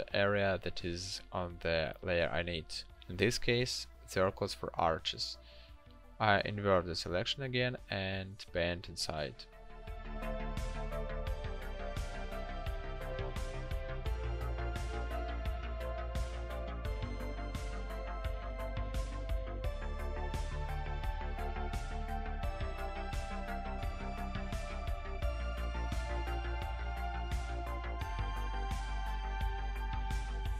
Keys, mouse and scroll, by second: 4.5 ctrl+shift+i, 12.0 ctrl+click, 22.4 ctrl+d, 22.9 l.